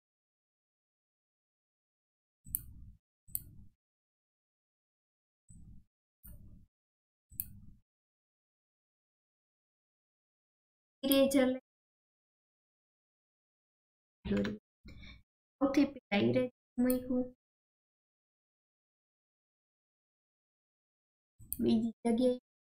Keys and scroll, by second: 0.9 typing, 1.3 ctrl+z, 13.8 ctrl+z.